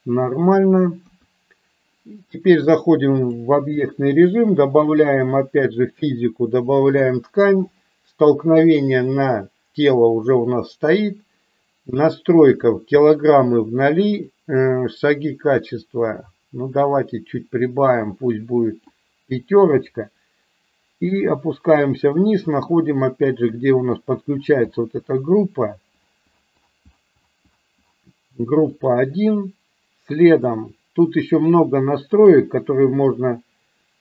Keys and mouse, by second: 1.0 KP_1, 2.7 click, 5.7 click, 7.0 click, 12.7 click, 14.4-18.8 drag, 23.4-28.8 drag, 32.1-34.0 drag.